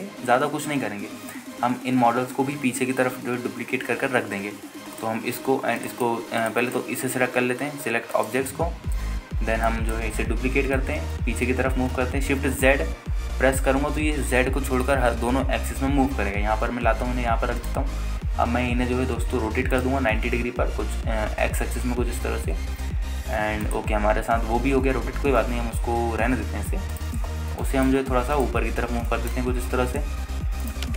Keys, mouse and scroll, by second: 6.2 click, 7.0 shift+click, 7.1 shift+right click, 7.6 click, 7.8-9.5 right drag, 10.3-10.6 scroll up 1, 10.8 alt+shift+middle drag, 12.0 shift+d, 13.2 shift+z, 18.8 click, 20.9 click, 21.3 r, 21.6 y, 22.5 x, 24.9 ctrl+drag, 25.2-25.5 scroll up 2, 26.0 g, 26.3 z, 28.1 shift+click, 28.5 scroll up 1, 28.8 alt+shift+middle drag, 29.2 scroll up 1, 29.5 click, 30.2 g, 30.8 z.